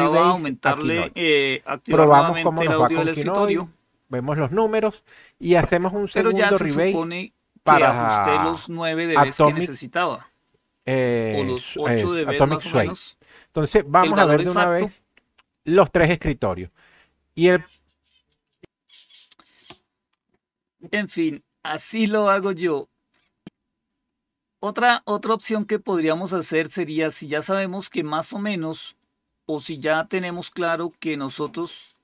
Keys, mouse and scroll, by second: 18.3 click, 23.1 click, 24.0-25.4 drag, 26.3 click, 26.8 click, 27.6 click, 28.4-32.0 drag.